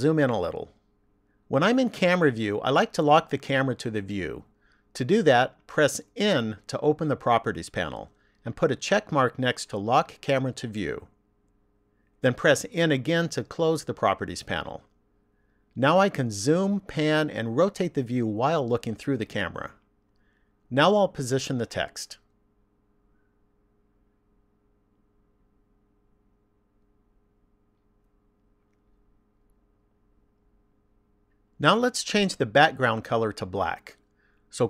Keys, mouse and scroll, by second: 0.4-1.0 scroll up 1, 1.0-2.3 scroll up 1, 6.2 n, 8.8 click, 12.7 n, 20.0-21.9 scroll up 5, 21.9 middle click, 23.6 shift+middle click, 24.7 middle click, 26.1 middle click, 27.2 shift+middle click, 28.8 middle click, 30.0 shift+middle click, 31.6 shift+middle click.